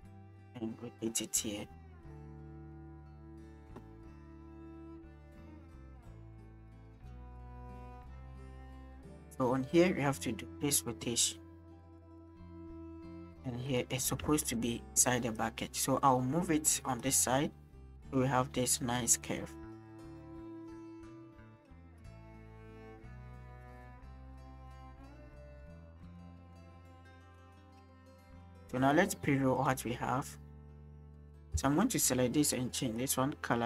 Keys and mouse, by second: 1.1-3.4 drag, 4.6 shift+middle click, 5.9-8.6 middle drag, 9.0 shift+middle drag, 10.0 middle click, 14.4-14.7 shift+middle drag, 22.6-22.9 shift+middle drag, 24.3 click, 26.3-28.5 drag, 29.6 click, 31.0 click, 31.7 shift+click, 32.6 click.